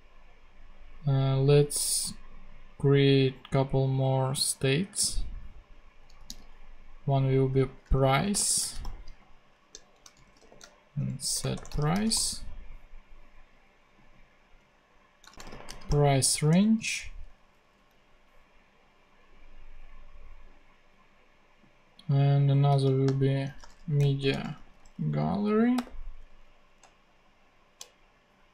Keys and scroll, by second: 6.0 super+d, 7.8-12.4 typing, 9.1 Right, 9.6 alt+shift+Right, 15.1-16.1 typing, 16.4 Return, 17.3 super+Right, 17.5 super+Left, 22.4-25.7 typing, 26.2 Right, 26.7 alt+shift+Right.